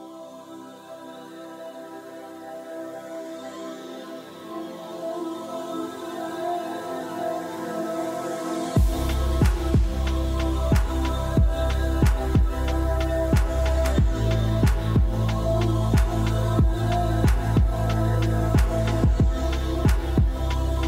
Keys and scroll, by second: 7.0 BackSpace, 7.7 BackSpace, 8.0 Return.